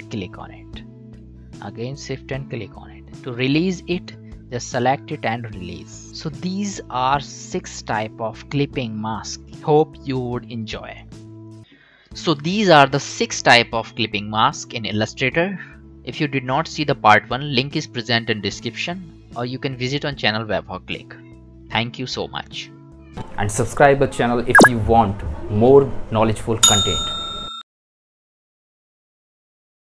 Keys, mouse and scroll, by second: 0.1 shift+click, 1.7 shift+click, 7.9 click, 9.3 ctrl+shift+].